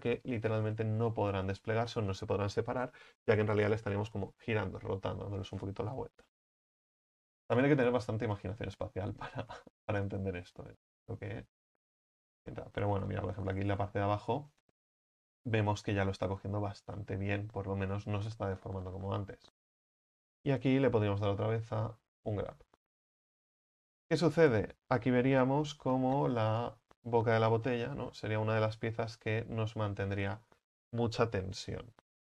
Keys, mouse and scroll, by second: 9.8-10.3 scroll down 7, 10.5-10.9 scroll up 4, 10.9-11.5 middle drag, 11.5-12.3 scroll down 1, 12.3-12.9 shift+middle drag, 12.9-13.5 scroll up 7, 13.5 right click, 13.9-17.6 middle drag, 17.6-18.5 scroll down 3, 18.5-18.9 scroll down 6, 18.9 middle click, 19.5 a, 19.7 a, 22.4 u, 26.6 right click, 27.7 l, 28.2-29.4 scroll down 1, 29.4 g, 31.5 scroll up 5.